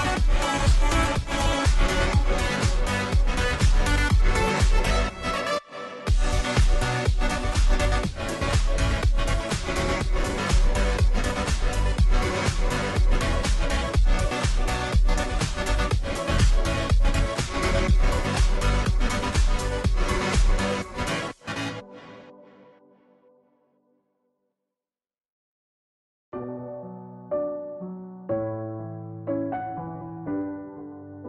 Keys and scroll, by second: 3.1 ctrl+t, 8.5 Return.